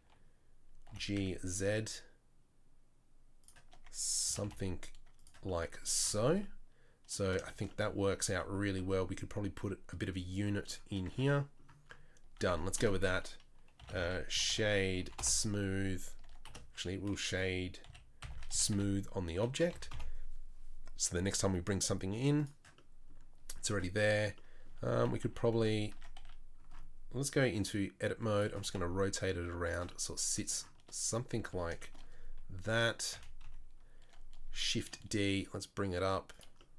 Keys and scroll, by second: 0.9 g, 4.2 g, 11.0 Tab, 12.5 Tab, 12.8 space, 16.2 Tab, 16.5 space, 25.2 KP_3, 25.5 KP_1, 25.9 Tab, 26.2 a, 27.6 r, 28.6 g, 33.1 KP_3, 33.4 KP_1, 34.8 shift+d.